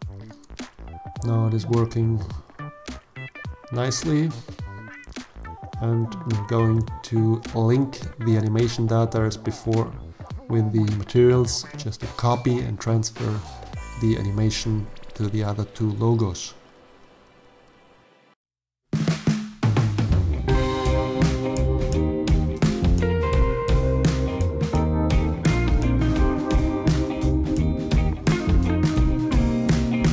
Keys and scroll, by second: 9.2 ctrl+l, 16.4 0, 18.0 0, 22.0 g, 22.5 z, 28.7 g, 29.1 x.